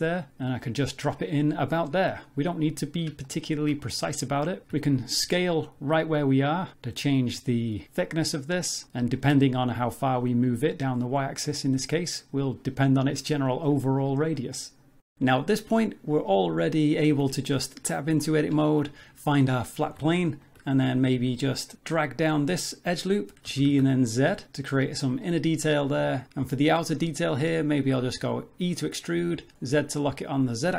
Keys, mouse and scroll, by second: 3.2 shift+middle click, 4.7 s, 9.3 g, 12.9 Tab, 13.4 z, 14.2 scroll down 2, 14.4 g, 14.8 shift+middle click, 15.0 middle click, 16.3 middle click, 17.1 Tab, 17.9 middle click, 18.6 shift+middle click, 19.3-19.7 scroll up 3, 19.9 2, 20.4 alt+click, 20.8 middle click, 23.4 g, 25.2 middle click, 26.2 alt+click, 26.2 ctrl+z, 28.0 e.